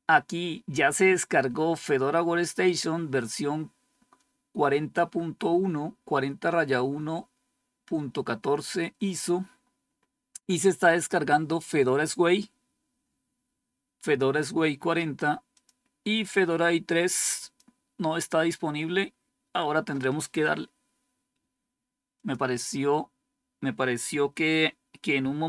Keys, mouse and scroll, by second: 15.4 click, 17.3 click, 19.7 click, 22.0 click.